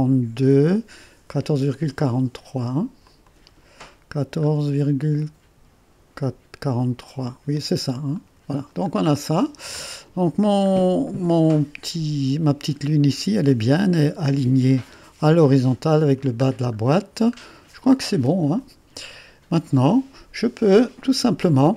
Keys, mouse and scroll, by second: 2.0 click, 3.1-4.4 drag, 4.5-6.2 scroll up 1, 6.2-8.2 drag, 9.0-9.4 scroll down 2, 9.5-10.7 scroll up 2, 10.7-12.6 scroll up 1, 16.5-17.9 scroll down 3, 18.6 click.